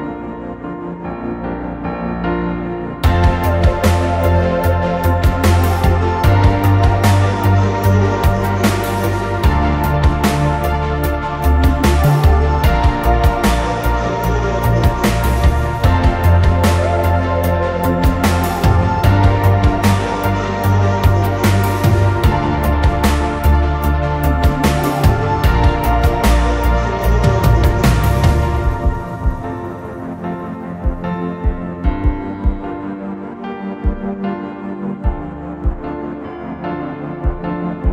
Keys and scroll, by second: 5.2 2, 5.5 4, 6.3 8, 7.4 Return, 16.5 4, 17.0 9, 17.7 6, 18.1 Return, 22.0-22.9 typing, 23.6 Return.